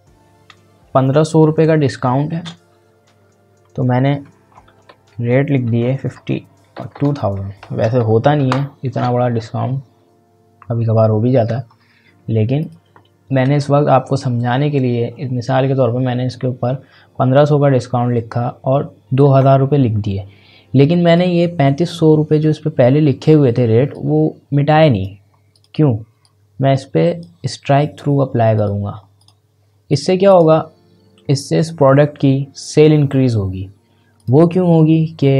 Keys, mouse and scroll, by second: 2.3 space, 4.2 shift+r, 6.9 s, 9.3 scroll up 1, 9.9 scroll down 1, 10.7-11.3 scroll up 1, 11.3-12.6 scroll down 1, 12.6 click, 21.0 click, 23.9-28.5 drag, 34.1 click.